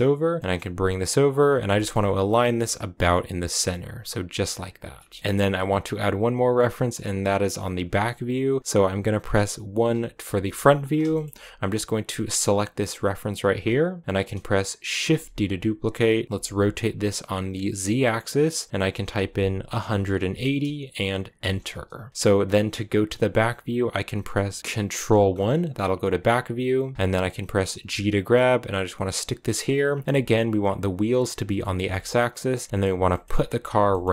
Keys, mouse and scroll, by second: 0.4 g, 1.6 shift+middle click, 1.8-2.4 scroll up 8, 2.4 g, 4.3-4.8 scroll down 6, 5.0 shift+middle click, 5.2-9.6 drag, 9.6 KP_1, 10.6-11.0 scroll up 2, 11.0-12.4 shift+middle drag, 12.4-14.9 right drag, 14.9 shift+d, 16.2-21.4 drag, 22.0-23.5 scroll up 1, 24.9 ctrl+KP_1, 26.1-26.6 scroll down 3, 26.9-27.6 scroll down 2, 27.6 g, 29.3-30.0 scroll up 9, 30.0-31.4 drag, 30.0 g, 31.5 shift+middle click, 31.9 g, 32.7 shift+middle click, 32.9 g, 33.7 g.